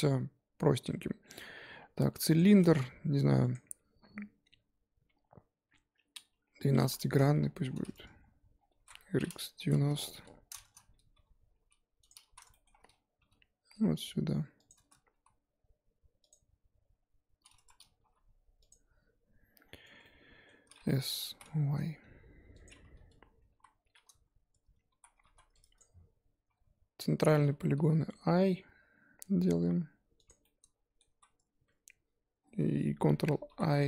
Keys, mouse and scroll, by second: 2.3 shift+a, 7.4-8.2 scroll down 8, 8.2-8.5 scroll up 1, 8.5 scroll down 3, 8.7 r, 9.9 scroll up 2, 10.7 scroll up 1, 11.1 g, 12.2 z, 12.5 shift+middle click, 12.7 scroll up 1, 13.2 g, 14.7 Tab, 15.1 s, 17.6 Tab, 18.0 g, 19.6 scroll down 4, 19.8 Tab, 20.0-21.2 middle drag, 21.2 s, 23.5 KP_1, 24.0-25.0 scroll up 2, 25.0 z, 25.8 click, 27.7 i, 30.4 middle click, 31.0 z, 33.5 ctrl+i.